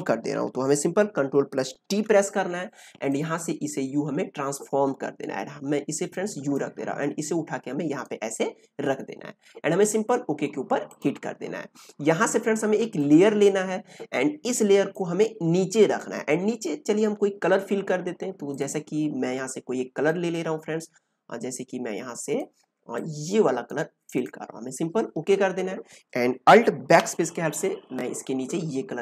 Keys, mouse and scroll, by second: 1.8 ctrl+t, 3.0-24.1 drag.